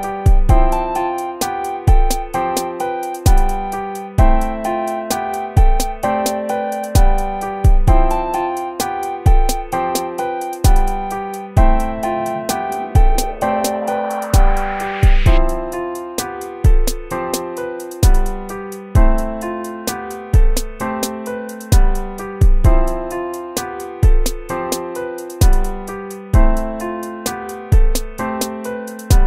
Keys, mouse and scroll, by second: 13.5 ctrl+-, 14.9 ctrl++, 15.9 ctrl+-, 25.0 ctrl++, 25.9 right click.